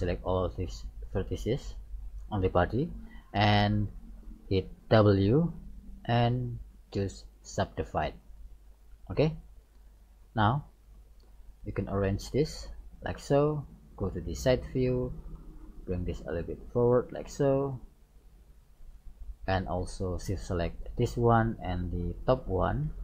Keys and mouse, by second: 0.1-1.3 middle drag, 2.1-3.9 middle drag, 5.2 w, 10.6 right click, 11.4 middle click, 12.3-13.4 drag, 14.2 KP_3, 16.1-17.7 drag, 18.1-20.0 drag, 20.0 middle click, 20.8-23.0 right drag.